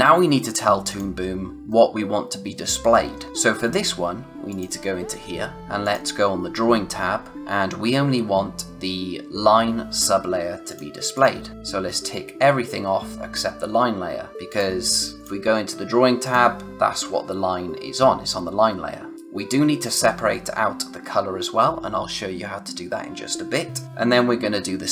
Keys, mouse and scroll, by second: 0.8 click, 1.6 middle click, 3.3 click, 10.6 click, 14.4 click.